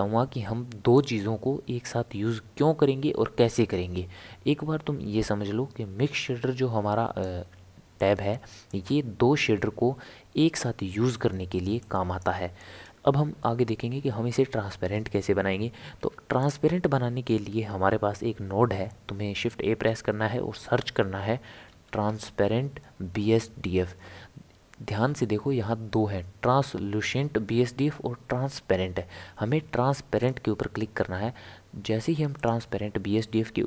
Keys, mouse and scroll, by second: 0.9 click, 8.0 click, 11.8 click, 13.3 Delete, 16.0 shift+a.